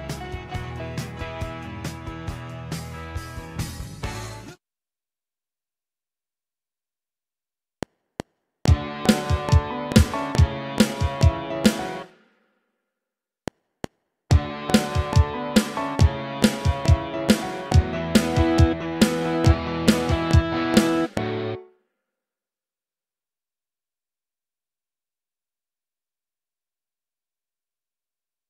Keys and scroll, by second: 4.3 space, 7.6 F7, 12.0 space, 13.3 F7, 21.5 space.